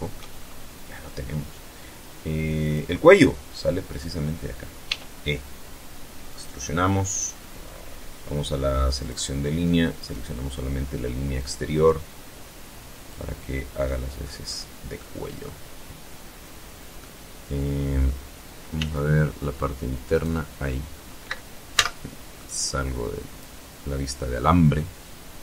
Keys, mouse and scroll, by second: 1.4 click, 2.6 right click, 3.6 e, 5.0 click, 5.4 middle click, 6.4 scroll up 1, 7.7 click, 8.7 right click, 10.1-12.0 drag, 12.5 middle click, 13.2 scroll up 1, 13.7 middle click, 15.0-15.3 scroll up 1, 15.7-16.9 middle drag, 17.4 z, 18.8 right click, 20.4 z, 21.2-22.3 drag, 23.1 scroll down 1, 23.5-25.4 middle drag.